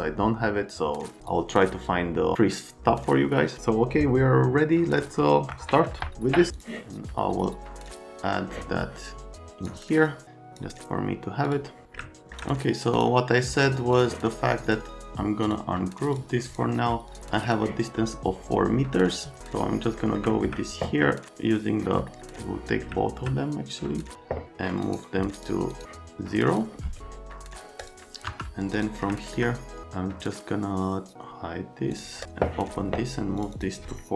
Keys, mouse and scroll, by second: 6.5 click, 7.8 click, 9.3 click, 10.2 click, 11.5 click, 12.0 middle click, 12.1 right click, 12.9 click, 13.9 click, 14.6 click, 15.4 click, 16.1 click, 16.5 click, 17.4 click, 19.1 click, 19.4 click, 20.0 middle click, 20.3 click, 22.1 click, 22.8 click, 23.7 click, 24.8 scroll, 25.3 click, 25.7 scroll, 26.5 middle click, 27.3 right click, 27.8 middle click, 28.3 F3, 28.7 click, 29.1 middle click, 29.8 click, 31.9 click, 33.4 click, 33.5 click.